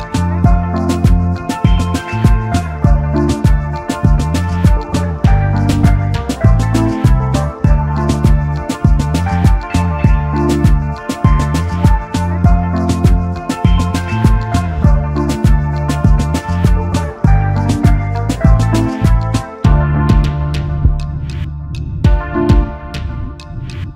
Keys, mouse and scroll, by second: 0.6 double click, 2.1 shift+click, 2.7 right click, 4.0 double click, 4.6 alt+scroll down 1, 5.2 double click, 6.7 typing, 8.5 typing, 9.8 alt+scroll up 1, 11.8 ctrl+shift+o, 13.1 double click, 14.4 alt+shift+click, 15.3 alt+scroll down 1, 16.2 alt+scroll down 1, 20.2 double click, 23.3 alt+scroll up 1.